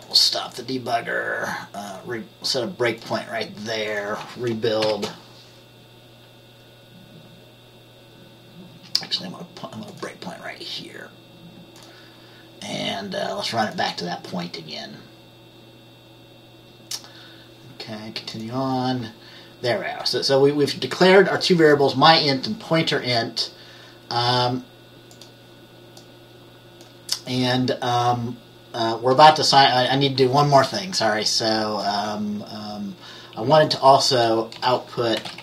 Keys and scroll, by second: 4.9 ctrl+b, 34.7 Return, 35.0-35.4 typing.